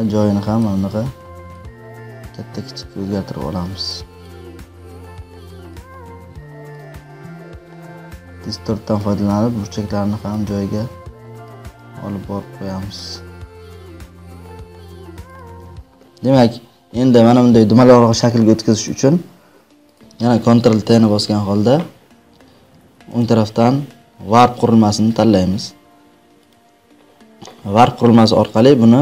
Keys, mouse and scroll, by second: 1.4 click, 4.9 click, 5.4 click, 5.6 ctrl+click, 8.9 ctrl+click, 11.5 ctrl+click, 14.3 ctrl+click, 15.3 click, 18.9 right click, 19.9 click, 21.0 ctrl+t, 23.5-26.0 ctrl+right drag, 26.4 click.